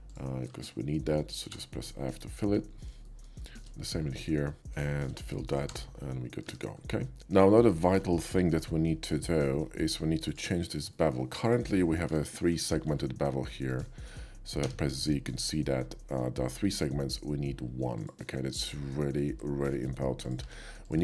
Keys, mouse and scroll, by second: 0.6 shift+middle click, 1.4 f, 1.8 middle click, 3.0 shift+middle click, 3.4 shift+middle click, 4.3 shift+middle click, 4.7 shift+click, 6.0 middle click, 6.0 f, 6.4 Tab, 7.0 middle click, 7.7-9.4 middle drag, 9.7 shift+middle drag, 10.2 shift+click, 10.9 shift+middle drag, 11.4 shift+click, 12.2 shift+middle drag, 12.6 shift+middle click, 12.9 q, 13.7 click, 14.6 z, 15.1 middle click, 17.2 middle click, 17.9 click, 18.3 middle click, 18.6 middle click, 20.2 shift+click, 20.4 q, 20.8 click.